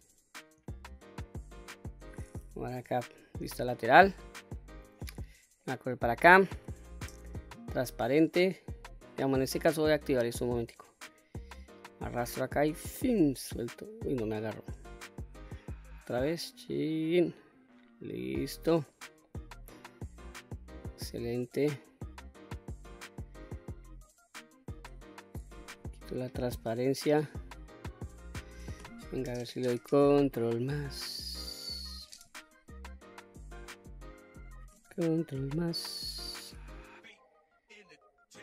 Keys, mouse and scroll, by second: 0.1 scroll up 2, 0.7 shift+middle click, 1.7 middle click, 2.7 KP_3, 5.0 shift+middle click, 6.5 q, 9.8 click, 11.0-12.9 drag, 14.9 click, 15.7-17.1 drag, 18.1-18.8 middle drag, 19.2-24.0 middle drag, 24.3-24.8 scroll down 2, 24.8 middle click, 25.7 q, 26.3-28.4 middle drag, 30.6 ctrl+KP_Add, 33.0-33.7 scroll down 2, 33.7-34.5 middle drag, 35.2 ctrl+KP_Add, 38.0-38.4 scroll down 1.